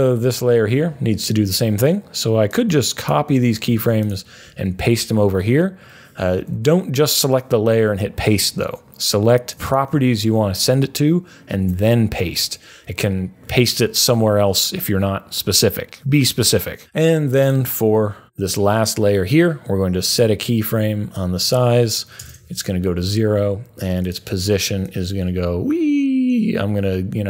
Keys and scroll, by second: 0.7 u, 3.5 super+c, 4.6 super+v, 6.5 super+z, 11.5 super+v, 22.2 0.